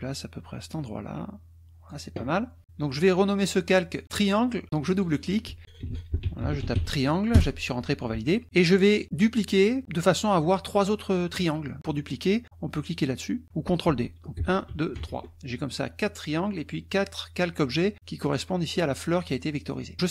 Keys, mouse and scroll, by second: 4.9 click, 5.6-7.4 typing, 14.4 ctrl+d, 18.2 click, 19.7 middle click.